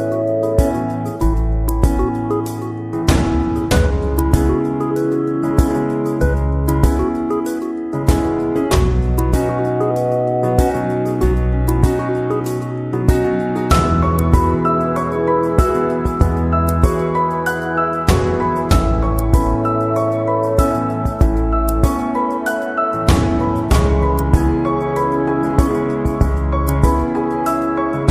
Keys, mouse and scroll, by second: 1.6 click, 4.4 typing, 4.5 click, 6.1 click, 7.9 click, 9.7-13.5 drag, 14.3 click, 16.0 click, 19.1 click, 20.5 click, 23.0-25.3 drag.